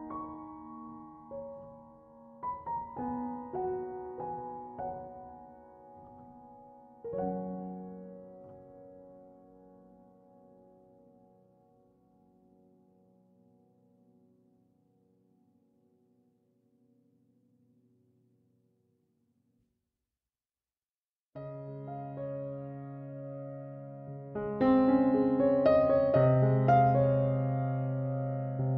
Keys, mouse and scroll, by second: 13.1 1, 13.4 6, 13.6 5, 14.7 /, 15.1 2, 16.1 Return, 22.4 ctrl+7.